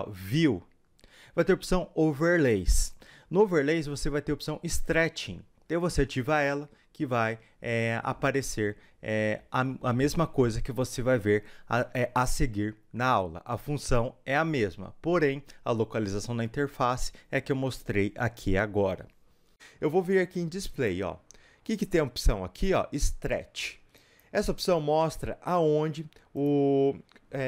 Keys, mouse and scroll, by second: 26.4 click.